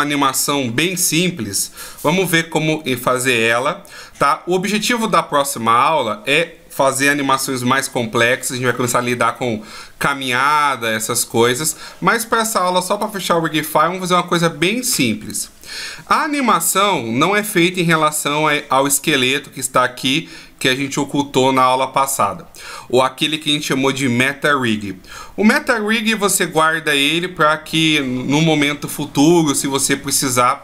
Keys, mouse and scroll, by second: 17.1 click, 19.3 click.